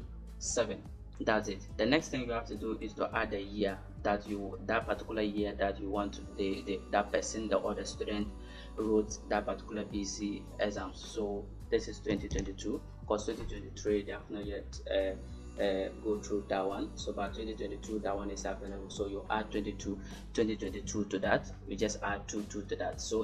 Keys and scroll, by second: 0.3 7, 12.0 2.